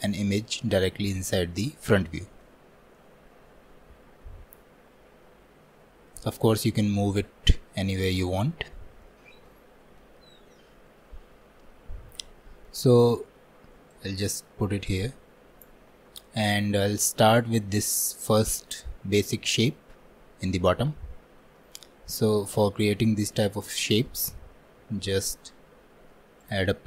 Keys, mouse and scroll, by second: 6.7 click, 9.1-12.1 shift+middle drag, 12.7-14.0 shift+middle drag, 14.0 click, 16.0-16.4 scroll up 1, 16.6 shift+middle click, 17.2 scroll up 1, 20.9 scroll down 1, 21.8 scroll down 1, 22.4 shift+middle click, 22.8-23.2 scroll up 2, 23.4-25.0 shift+middle drag, 25.0 shift+a.